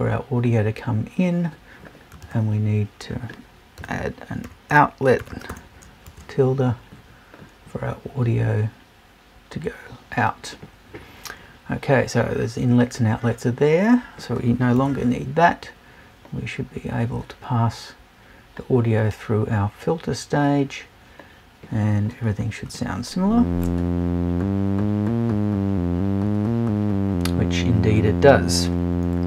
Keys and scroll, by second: 14.7 BackSpace.